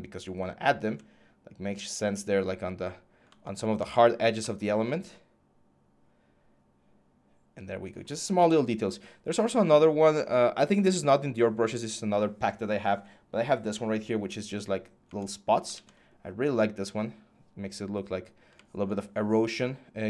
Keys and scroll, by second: 0.6 ctrl+z, 15.5 ctrl+z.